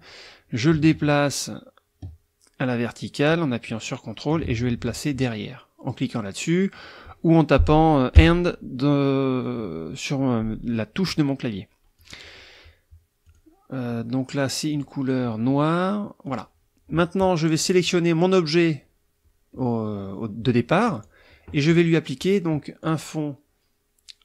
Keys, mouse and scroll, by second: 8.1 End, 12.0 click, 13.2 click, 14.7 click, 16.3 click, 17.5 click, 17.8 click, 20.9 click, 22.8 click.